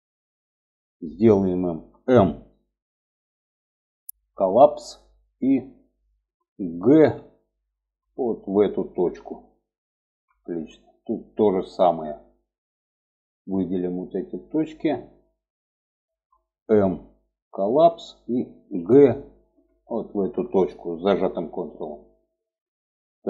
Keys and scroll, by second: 1.8 m, 6.3 g, 16.3 m, 18.0 g.